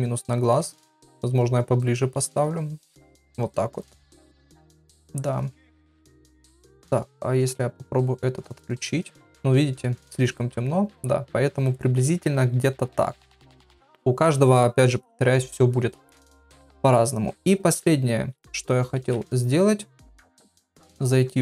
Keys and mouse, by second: 5.9 middle click, 6.5 shift+middle click, 7.1 click, 8.4 click, 10.2 click, 18.4 click, 19.2 ctrl+s.